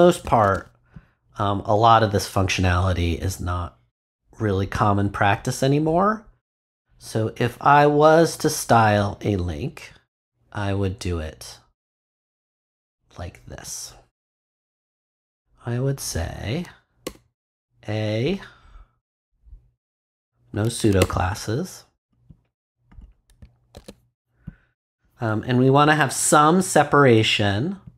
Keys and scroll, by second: 0.2 super+Return, 0.4 super+v, 17.0 BackSpace, 21.0 BackSpace, 23.7 super+s.